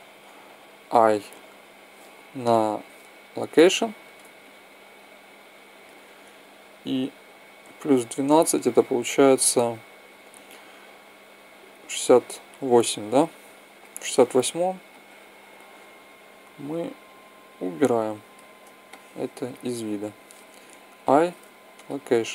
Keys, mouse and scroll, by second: 2.1 i, 4.1-6.1 middle drag, 6.9-8.7 drag, 14.6-16.4 drag, 20.6 i.